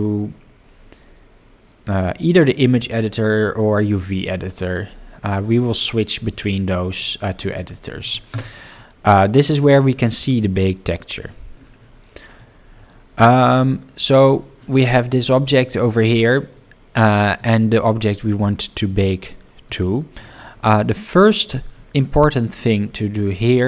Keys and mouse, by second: 6.3 middle click, 8.7-9.3 middle drag, 15.0-15.4 middle drag, 15.6 shift+middle drag, 17.9 click, 18.9 click, 19.7 click, 22.1-23.3 middle drag.